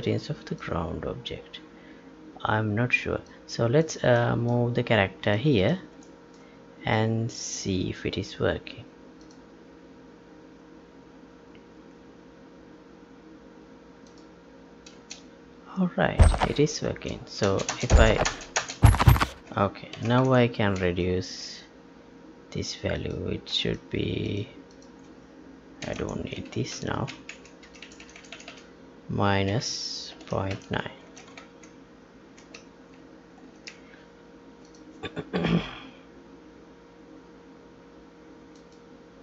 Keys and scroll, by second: 14.9 space, 16.8 space, 19.9 ctrl+p, 20.3 Tab, 21.0 alt+Tab, 25.8 ctrl+k, 25.9 ctrl+c, 26.7 Down, 27.6 Left, 31.0 ctrl+s, 31.6 alt+Tab, 32.5 Tab, 33.4 ctrl+p, 35.3 F11.